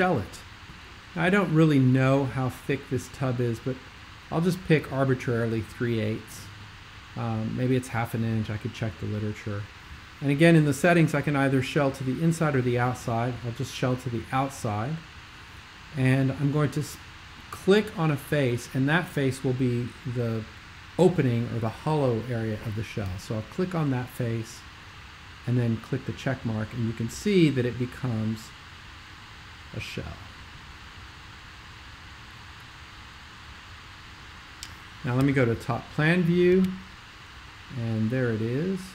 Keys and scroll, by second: 35.3 super+5.